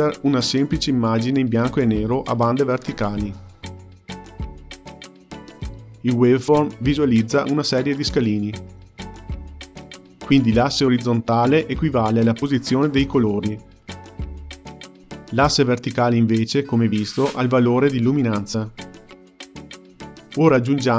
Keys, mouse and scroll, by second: 18.6 shift+a.